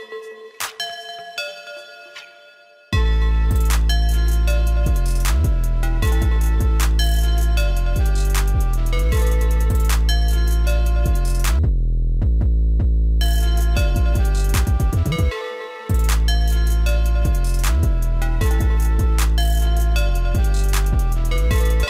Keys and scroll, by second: 20.3 ctrl+s.